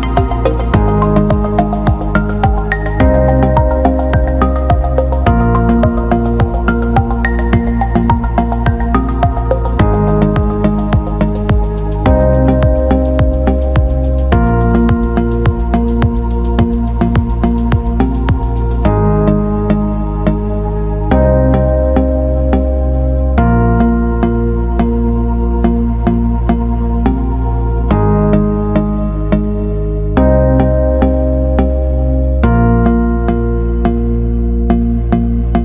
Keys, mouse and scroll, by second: 0.2-0.5 alt+middle drag, 0.6 alt+shift+middle click, 0.9-1.2 ctrl+alt+middle drag, 1.3-1.7 alt+shift+middle drag, 1.8 ctrl+alt+middle drag, 2.2 alt+middle click, 2.7 alt+shift+middle click, 3.6-4.4 ctrl+alt+middle drag, 4.7 click, 5.3 Tab, 7.6 click, 7.8 click, 8.5 click, 8.7 click, 9.1 alt+middle click, 9.6 alt+shift+middle click, 10.9 click, 11.1 click, 11.5 alt+shift+middle click, 12.6 click, 13.4 click, 14.1 click, 14.8 click, 16.0 ctrl+click, 16.7 alt+middle click, 18.3 ctrl+click, 18.6 alt+middle click, 19.3 alt+shift+middle click, 21.7 ctrl+z, 22.5 ctrl+click, 26.2 alt+middle click, 26.7 alt+shift+middle click, 28.0 alt+middle click, 32.0 click, 32.4-33.5 alt+middle drag, 33.7 alt+shift+middle click, 34.1 alt+middle click, 35.2-35.6 drag.